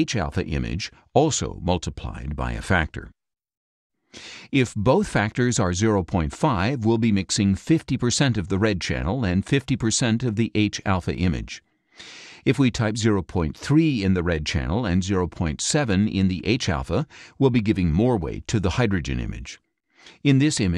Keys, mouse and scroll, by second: 0.0-3.0 typing, 0.2 KP_Add, 5.1 shift+Left, 5.7 shift+KP_0, 6.1 shift+KP_5, 6.8 BackSpace, 8.8 shift+Left, 9.8 shift+KP_Decimal, 10.0 shift+KP_5, 12.6 shift+Left, 13.6 KP_3, 14.2 Right, 18.6 KP_7.